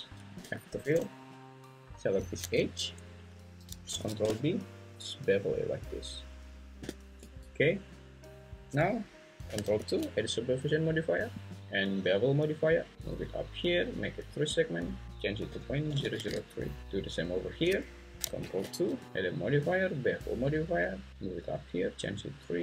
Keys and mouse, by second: 0.4 f, 2.5 `, 3.9 ctrl+b, 7.2 Tab, 9.8 ctrl+2, 11.4-13.2 drag, 14.7-16.3 drag, 16.0 0, 18.4 ctrl+2, 19.0-20.1 drag, 22.2-22.6 drag.